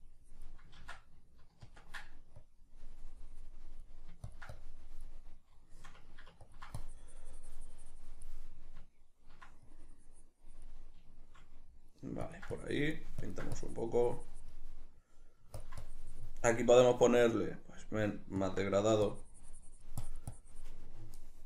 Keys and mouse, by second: 1.1 ctrl+z, 5.6-6.9 middle drag, 6.9-11.3 ctrl+drag, 11.3-12.7 shift+middle drag, 12.7-21.4 ctrl+drag.